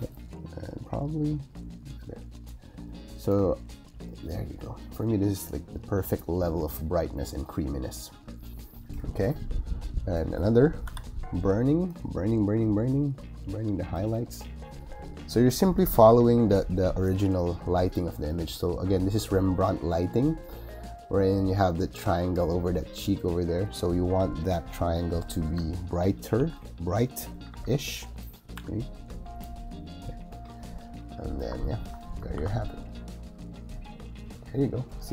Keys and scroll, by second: 10.8 o, 15.9 [, 25.3 b, 26.3 x, 27.2 [, 28.4 x, 32.3 shift+super+g, 32.8 super+g.